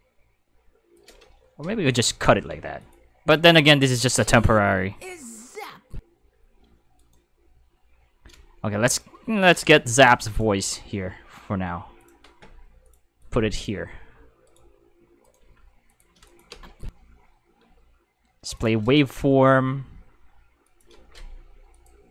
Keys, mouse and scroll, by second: 1.0 right click, 2.8 click, 4.0 space, 6.5 space, 7.0 right click, 8.9 shift+right click, 9.8 g, 10.3 click, 12.0 click, 12.9 click, 13.2 click, 14.5 click, 15.2 right click, 15.4 g, 15.9 click, 16.2 click, 16.5 space, 17.6 space, 18.5 click, 19.0 right click, 19.4 g, 20.7 click, 21.7 click.